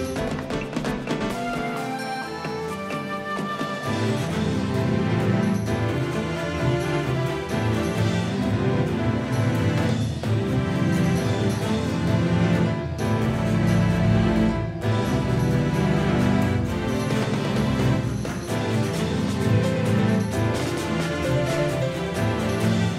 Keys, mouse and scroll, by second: 1.4 s, 3.4 s, 13.5 a, 17.1-19.8 middle drag, 19.8 c.